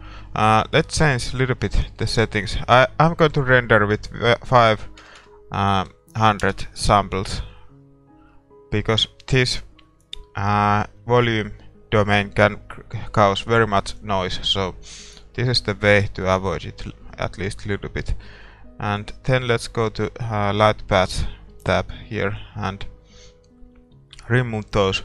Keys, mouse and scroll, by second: 2.7-6.5 drag, 6.5 KP_0, 13.5-24.1 drag.